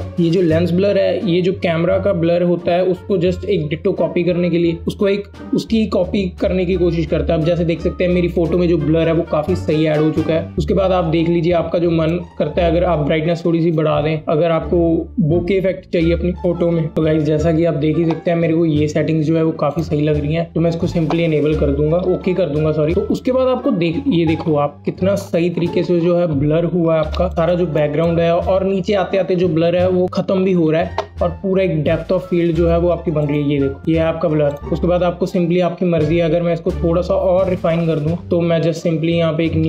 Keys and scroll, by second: 26.9 alt+space.